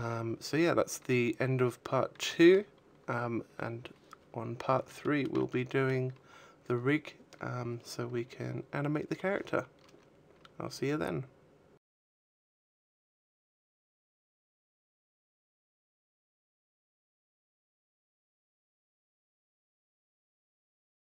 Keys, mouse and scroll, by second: 4.6 shift+middle click, 5.0 middle click.